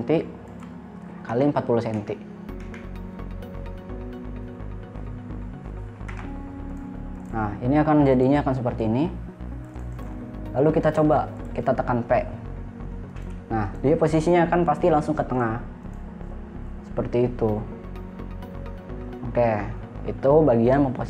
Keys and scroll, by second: 1.7 4, 2.4 0, 6.5 Return, 13.6 p.